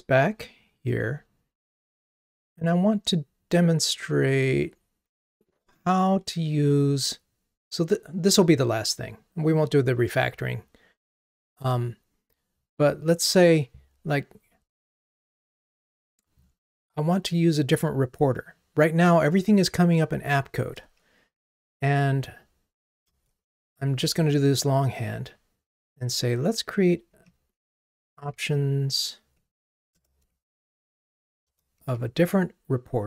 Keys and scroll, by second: 10.6 ctrl+Tab, 30.0 Return.